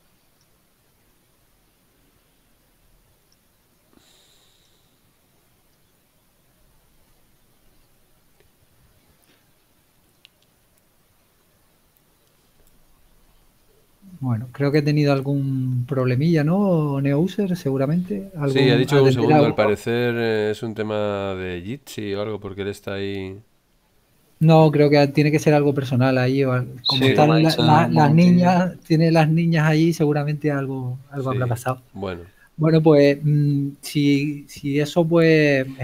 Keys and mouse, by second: 3.3 click, 4.7 click.